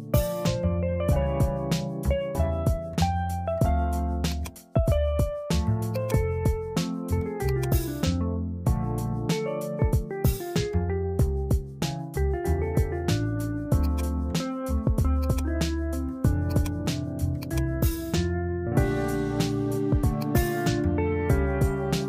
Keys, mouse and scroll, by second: 1.7-6.1 drag, 7.6-10.1 drag, 13.9 click, 15.3-16.6 drag, 17.5-20.0 drag, 20.2 click.